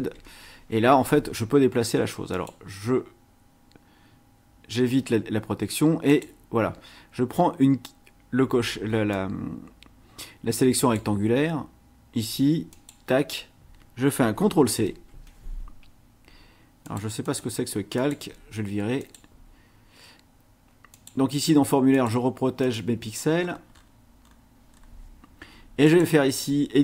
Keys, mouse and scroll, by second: 0.0 ctrl+z, 2.3 click, 6.1 click, 9.1-11.1 drag, 12.7 click, 14.8 ctrl+c, 16.8 click, 17.2 click, 18.0 click, 19.0 click, 20.9 click, 21.9 click, 22.6 click, 23.4-24.5 scroll up 4, 24.7 scroll down 1, 25.8 right click.